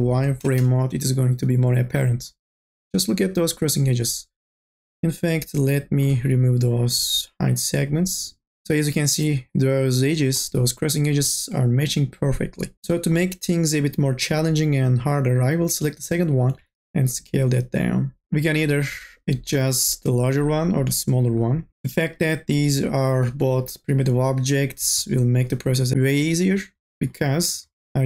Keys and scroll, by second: 0.0 n, 0.5 b, 16.6 t.